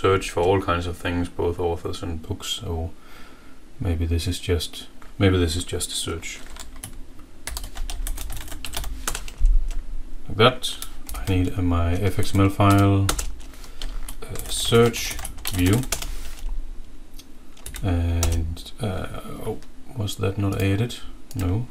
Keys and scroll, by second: 7.6 shift+F6, 7.9-9.2 typing, 11.0 alt+Insert, 11.0-13.0 typing, 14.2-16.2 typing, 17.7 Right, 18.1 Return.